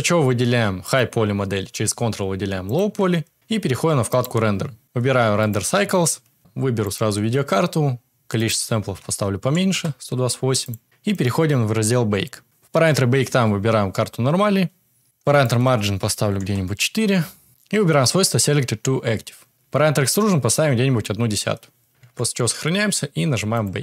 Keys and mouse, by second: 0.8 click, 4.0 click, 4.8-6.3 drag, 6.4 click, 8.3-9.7 drag, 10.6 click, 11.1 click, 15.2-16.4 drag, 18.8 click, 20.3-21.4 drag, 22.1 ctrl+s, 23.5 click.